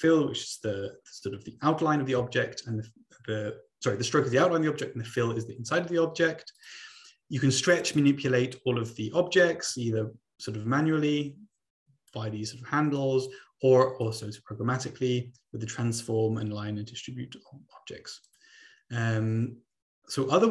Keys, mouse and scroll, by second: 6.7 click, 7.8 click, 8.2 click, 9.4-10.2 ctrl+scroll up 2, 10.2-10.8 ctrl+scroll up 1, 11.0-12.3 drag, 13.2 click, 14.2 click, 18.3 click.